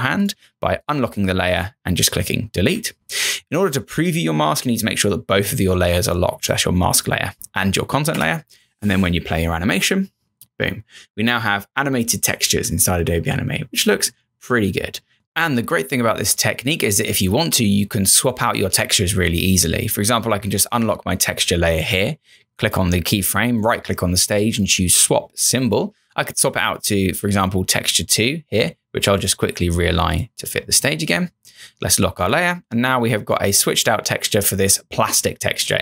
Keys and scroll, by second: 8.1 Return, 15.1 Return, 33.4 Return.